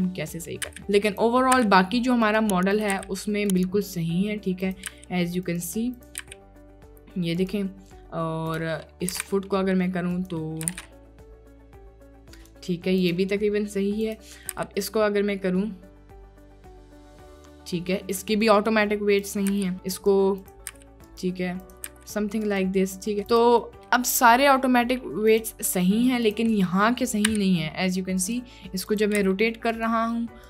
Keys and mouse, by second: 0.7 r, 1.6 r, 2.7 click, 3.0 r, 4.7 click, 5.0 r, 6.0 click, 6.3 r, 8.9 click, 9.2 r, 9.3 z, 10.5 click, 10.8 r, 13.1 click, 13.1 x, 14.1 click, 14.7 r, 19.2 click, 19.6 r, 20.5 click, 20.8 r, 21.7 click, 22.0 r, 23.4 click, 23.7 click, 25.3 click, 26.3 click, 27.3 r, 28.9 click, 29.3 r.